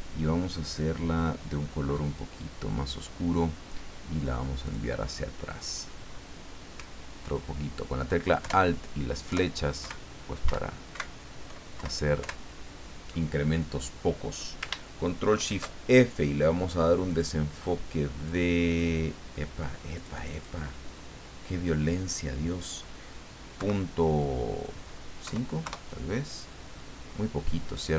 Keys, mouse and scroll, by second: 2.0 click, 4.6 click, 8.4 alt+Down, 9.3 alt+Right, 9.8 alt+Down, 10.5 alt+Up, 10.9 alt+Right, 11.8 alt+Left, 12.2 alt+Down, 15.3 ctrl+shift+f, 17.1 click, 18.2 click, 19.9 click, 23.6 KP_Decimal, 25.2 KP_5, 25.6 KP_Enter.